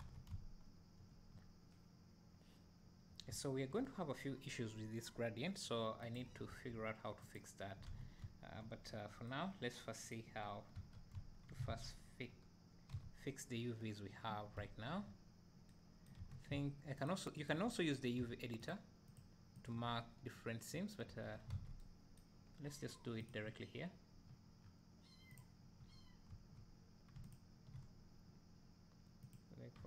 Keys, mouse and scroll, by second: 0.3 `, 5.0-6.2 right drag, 6.2 click, 7.3 ctrl+a, 8.2 `, 8.9 scroll up 1, 10.5-10.9 scroll down 1, 10.9 Tab, 11.2 `, 11.7 alt+a, 17.4 alt+click, 21.1 `, 21.5 alt+a, 22.5 scroll up 1, 23.3 click, 25.3-25.8 drag, 26.3 1, 27.3 alt+click, 29.3 click.